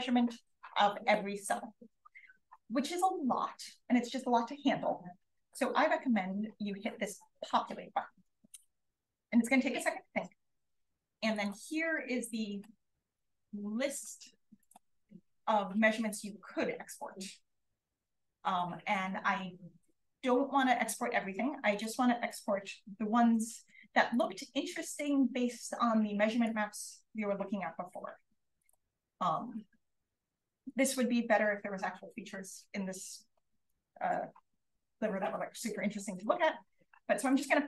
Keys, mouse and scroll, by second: 14.5 click, 17.0-17.8 scroll up 1, 19.9-20.8 scroll up 1, 20.8-21.4 scroll up 1, 21.6-22.9 drag, 24.9 click, 28.5 click, 29.5 click, 30.5 click, 33.5 click, 33.5 right click, 36.1 click, 36.1 right click.